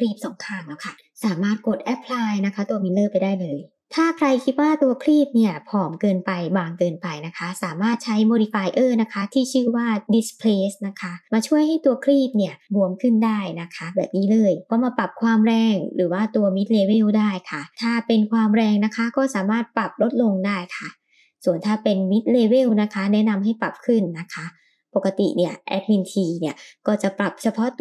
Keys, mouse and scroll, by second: 0.1 middle click, 0.5-1.0 scroll up 2, 1.6-2.3 drag, 2.8-3.1 shift+middle drag, 3.5 middle click, 9.6-11.5 drag, 12.9-16.1 middle drag, 17.9-20.4 drag, 20.9 shift+click, 21.5-24.7 drag, 24.9-27.8 drag.